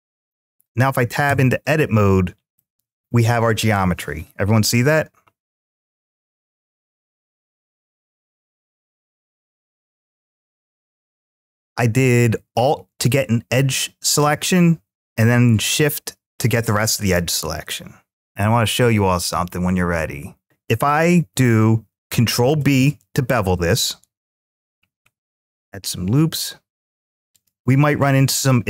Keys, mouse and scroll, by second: 0.1-1.1 drag, 1.1 Tab, 2.4-5.6 middle drag, 6.1-9.2 alt+drag, 14.0-15.8 middle drag, 16.7-18.1 middle drag, 22.1 ctrl+b, 24.9-25.4 scroll up 2, 26.4-27.2 scroll up 1, 27.2 click.